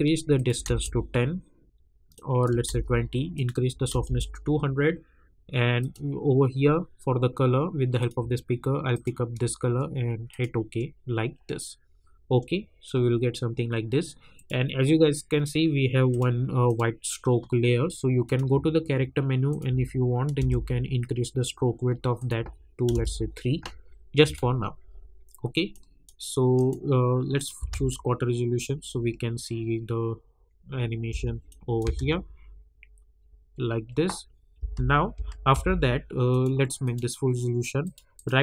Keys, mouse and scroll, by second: 6.0 click, 7.9 click, 14.3 click, 20.3 Return, 22.1 click, 22.9 Return, 24.2 click, 27.5 space, 31.0 space, 31.4 click, 31.8 space, 34.5 space, 36.3 click, 38.1 right click.